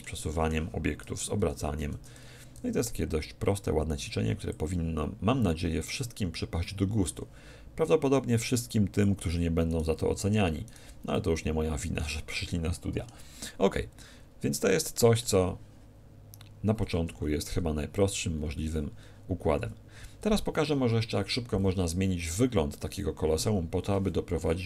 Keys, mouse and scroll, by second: 1.7 z, 2.5 b, 8.3 x, 9.7-12.3 right drag, 11.1-16.6 middle drag, 16.8 r, 19.4-20.4 scroll up 1, 19.5 a, 20.4-21.4 middle drag, 23.3 2.